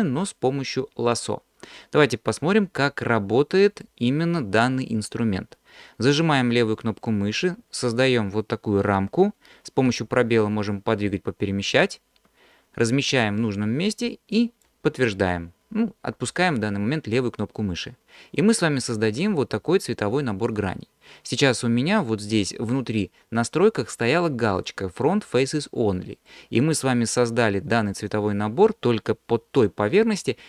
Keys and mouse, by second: 6.8-14.7 drag, 26.3-29.9 middle drag, 29.9 alt+click, 30.3 alt+middle click.